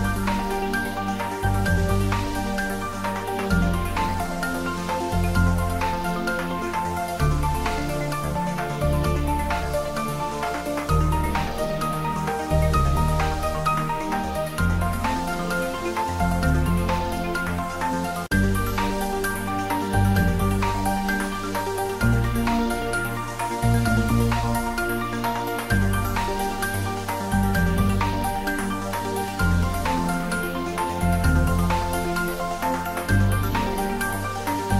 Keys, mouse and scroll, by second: 0.6 click, 1.0-1.7 middle click, 1.4 middle click, 2.0 ctrl+middle click, 2.2 shift+middle click, 2.9 click, 3.2 shift+click, 3.6 x, 4.5 click, 4.7 ctrl+s, 6.7 click, 9.2 click, 12.1 scroll down 1, 13.4 click, 13.5-13.8 middle click, 14.3 click, 17.6-17.9 middle click, 18.4 click, 20.9 middle click, 21.2-21.6 middle drag, 23.8 middle click, 24.9 click, 26.1 click, 27.7-28.5 scroll down 1, 28.5 click, 29.8 s, 31.4 click, 31.7 ctrl+s, 32.2 middle click, 32.8 ctrl+s, 33.9 click.